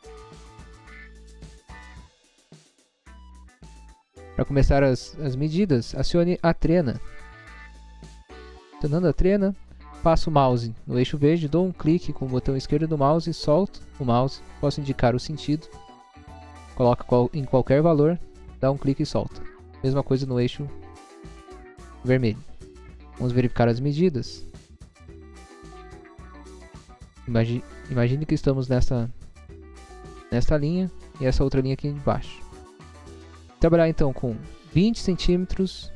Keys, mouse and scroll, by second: 0.6 click, 4.0 scroll down 1, 4.6 scroll up 1, 7.1 click, 12.7 click, 18.8 click, 20.3 click, 21.4 click.